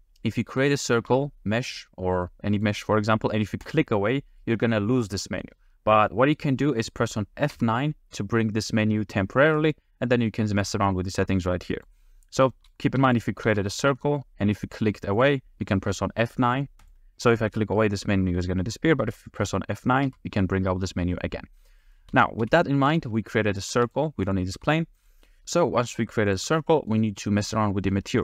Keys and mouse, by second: 0.4 shift+click, 1.0 shift+a, 7.5 F9, 12.5 middle click, 13.0 x, 13.5 shift+a, 15.8 click, 16.6 click, 16.8 click, 18.6 middle click, 20.0 F9, 21.8 middle click, 22.1 ctrl+z, 22.4 ctrl+z, 22.9 ctrl+z, 23.8 x, 24.3 click, 24.6 g, 25.4 g, 25.4 a, 26.3 click, 26.5 g, 27.9-28.2 middle drag.